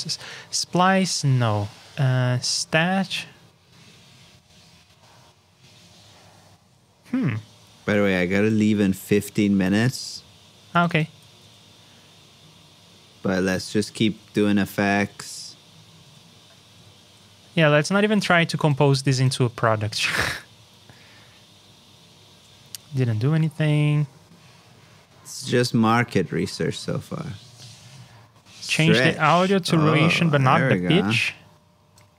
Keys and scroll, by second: 11.2 super+c, 11.4 super+Tab, 14.0 super+v, 15.0 super+Tab, 18.8 super+c, 19.5 super+v, 23.1 super+Tab.